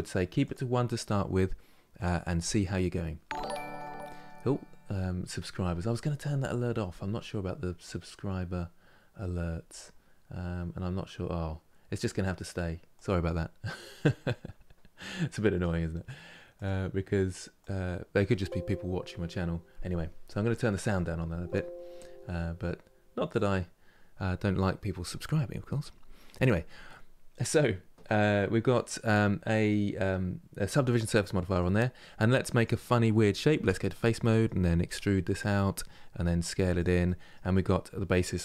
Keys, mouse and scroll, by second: 2.7-6.5 middle drag, 28.9-32.2 middle drag, 32.2-33.3 drag, 33.3 3, 33.5 click, 33.9 middle click, 34.5 e, 36.7-38.4 middle drag.